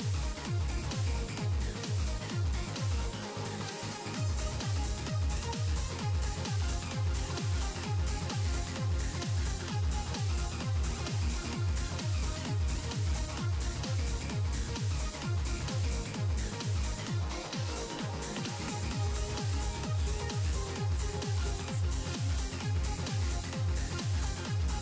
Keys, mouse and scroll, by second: 0.5-1.9 middle drag, 1.9-2.3 scroll up 2, 2.3-3.4 middle drag, 3.4 click, 3.8 middle click, 4.7 click, 5.3 s, 7.5 g, 8.6 click, 8.9-9.3 scroll down 1, 9.3-10.7 middle drag, 10.7-11.1 scroll down 2, 11.1-12.8 middle drag, 12.8-13.7 scroll up 3, 13.7 click, 14.2 r, 14.6 r, 16.2 r, 18.7 middle click, 19.6 scroll down 2, 19.9 click, 20.2-21.3 middle drag, 21.3-21.7 scroll down 1, 21.7-24.3 middle drag, 24.3 scroll down 3, 24.7 shift+middle click.